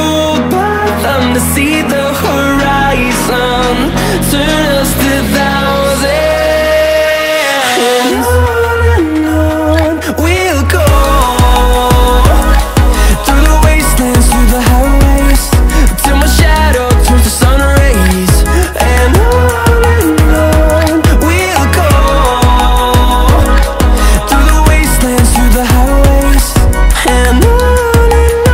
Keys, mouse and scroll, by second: 3.1-3.6 typing, 5.1 click, 7.9-8.3 typing, 9.8 click, 11.8-13.1 typing, 15.2 click, 19.4 click.